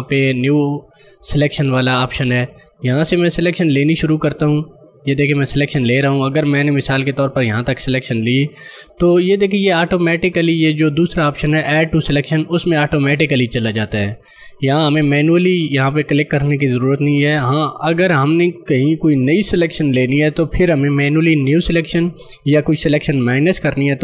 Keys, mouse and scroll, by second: 0.5 click, 3.5 click.